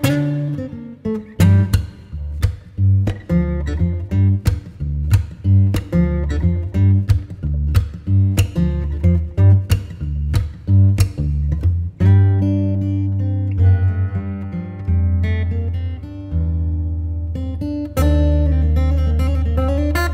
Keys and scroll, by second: 0.6 super+t, 1.3 alt+super+t, 7.7 Return, 8.7 z, 9.5 space.